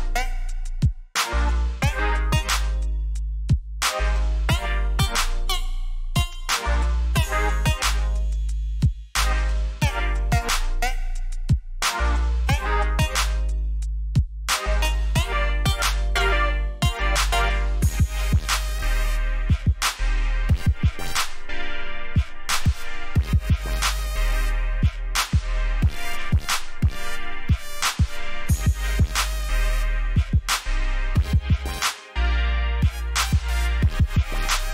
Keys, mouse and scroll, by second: 3.3 click, 7.0 click, 11.5 alt+scroll up 1, 12.0 alt+scroll up 1, 12.7 scroll up 1, 13.2-13.7 scroll down 2, 14.2 scroll up 1, 14.7 scroll up 1, 15.2-16.2 scroll down 3, 16.7 alt+scroll up 1, 17.3 alt+scroll up 1, 17.8-18.4 alt+scroll down 2, 18.8 alt+scroll up 1, 19.4 alt+scroll up 1, 20.1 alt+scroll down 1, 20.6 alt+scroll down 1, 22.1-22.5 alt+scroll up 3, 23.1-23.6 scroll down 2, 26.9 scroll down 1, 27.4 scroll down 1, 29.0-29.8 alt+scroll down 2, 31.1-33.0 scroll up 1, 33.0 click.